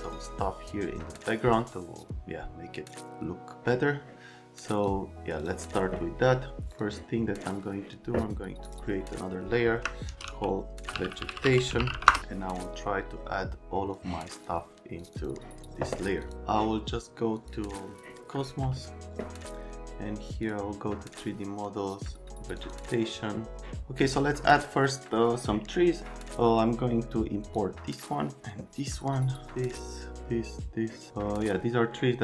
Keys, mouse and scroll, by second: 4.6 click, 5.4 click, 6.7 click, 8.6 click, 9.8-12.4 typing, 13.9 click, 15.0 click, 15.1 click, 16.2 click, 17.4 click, 20.4 click, 22.6 click, 27.4 click.